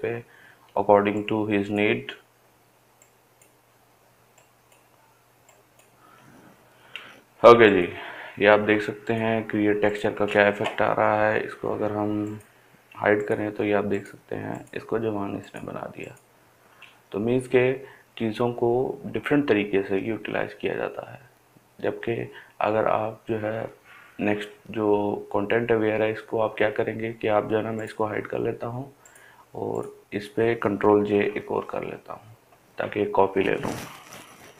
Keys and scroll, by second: 31.3 ctrl+j.